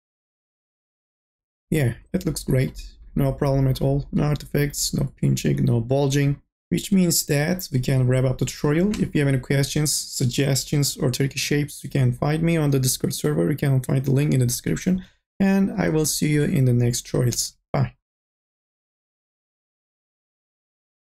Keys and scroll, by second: 19.6 n.